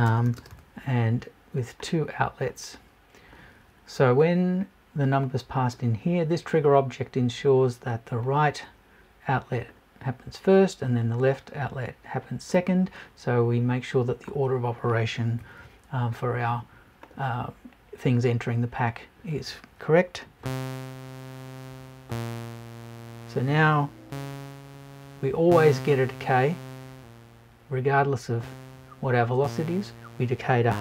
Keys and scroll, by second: 15.4 Left.